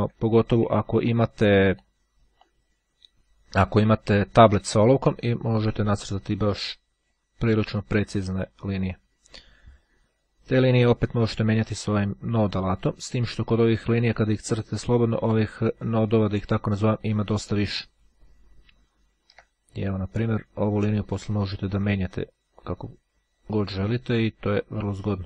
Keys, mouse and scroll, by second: 1.1-2.5 ctrl+drag, 2.5-3.0 ctrl+scroll down 1, 3.1-3.7 scroll up 1, 5.3-7.7 drag, 8.5-9.8 drag, 10.6 click, 12.9 click, 13.7 click, 15.4 click, 16.2-17.0 ctrl+scroll up 2, 17.0-17.8 ctrl+scroll up 3, 18.3-18.8 ctrl+scroll down 2, 19.0-19.6 ctrl+scroll up 2, 20.2 click, 21.4 click, 23.5-24.5 drag.